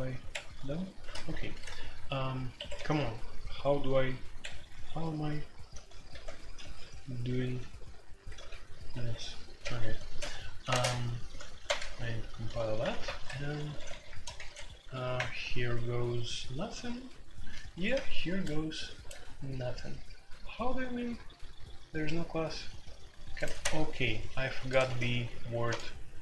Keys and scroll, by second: 0.3 Escape, 0.7-1.1 typing, 1.1 ctrl+k, 1.3 ctrl+u, 2.5 Escape, 2.8 u, 4.4 Escape, 5.0 ctrl+r, 5.7 ctrl+r, 6.1 ctrl+r, 6.4 ctrl+r, 7.0 ctrl+r, 7.0 u, 7.4 u, 8.3 ctrl+r, 8.9 Escape, 9.6 F2, 10.6 space, 10.7 Tab, 11.6 ctrl+c, 11.8 ctrl+c, 12.9 alt+2, 13.3-15.6 typing, 23.6 q, 24.8 typing.